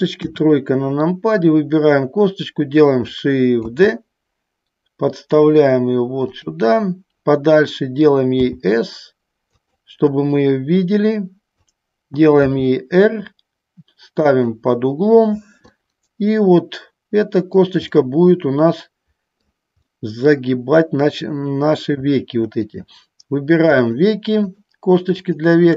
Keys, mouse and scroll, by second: 0.3 KP_3, 3.8 shift+d, 6.5 click, 9.7 click, 10.9 click, 12.6 r, 14.3 click, 15.9-17.7 middle drag, 18.1-19.6 middle drag, 20.1 middle click, 22.8 click, 23.9 shift+click, 24.5 shift+click.